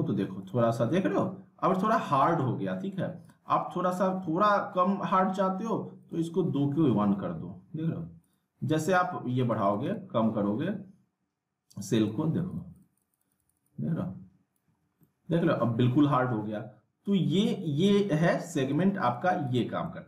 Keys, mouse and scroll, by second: 0.5-1.1 middle drag, 3.2 click, 6.0 click, 8.2 click, 12.8 click, 14.8 scroll down 1, 15.0 middle click, 17.0-17.7 drag, 19.9-20.0 middle drag.